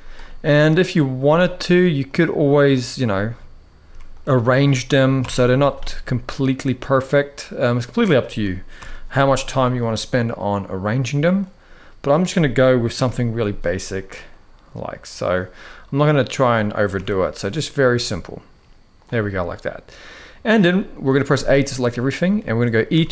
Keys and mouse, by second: 0.9 z, 2.4 click, 2.8 z, 4.9 ctrl+l, 5.8 g, 7.7 click, 8.5 ctrl+l, 9.4 g, 11.8 click, 12.7 ctrl+l, 13.5 g, 15.8 click, 16.7 ctrl+l, 17.7 g, 19.7 middle click, 20.5 shift+middle click, 21.0 a, 21.3 shift+middle click, 22.1 shift+middle click, 22.6 e.